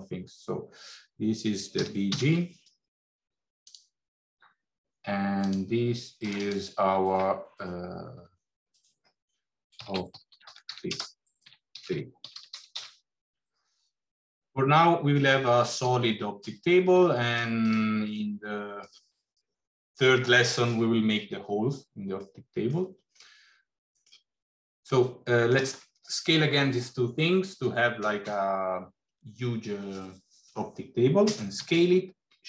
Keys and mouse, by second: 5.2 click, 6.3-13.5 drag, 14.3 middle click, 17.0 middle click, 17.4 shift+click, 18.2 middle click, 22.1 middle click, 23.1 middle click, 24.9 middle click, 31.6 s.